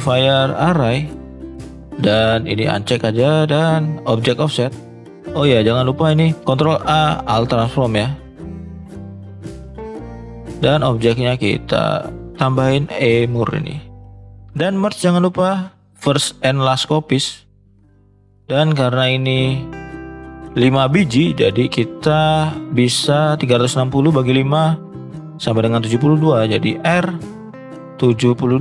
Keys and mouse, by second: 2.5 click, 4.0 click, 4.7 click, 5.7 click, 6.2 click, 6.4 ctrl+a, 14.5 click, 16.0 click, 18.1 click, 26.8 r.